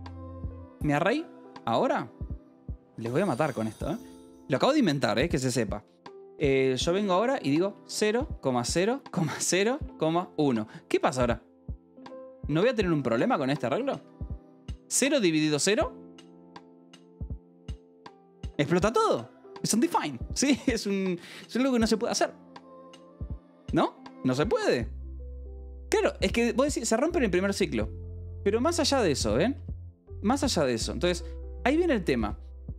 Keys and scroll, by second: 0.0-0.7 typing, 2.3 space, 3.0 =, 3.3 space, 5.2-10.0 typing, 12.5 Escape, 13.5 ctrl+s, 13.7 o, 13.9 Escape, 14.6 j, 29.1-32.5 typing.